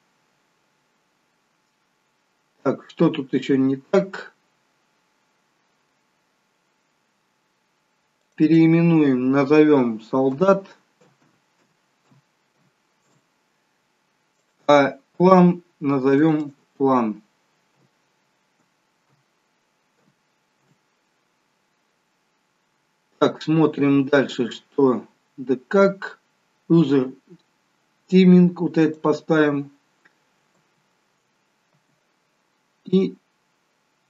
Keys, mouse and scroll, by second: 1.8-3.1 scroll up 4, 8.4 click, 8.4 scroll up 9, 8.5 click, 14.5 click, 22.5 scroll down 2, 29.0 click, 30.7 space, 32.2 space, 33.1 click.